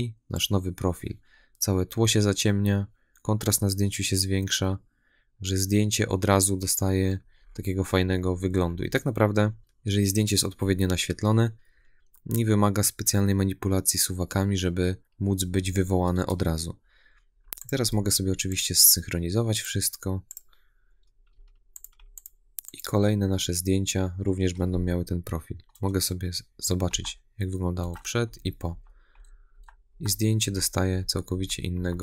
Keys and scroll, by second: 26.7 \.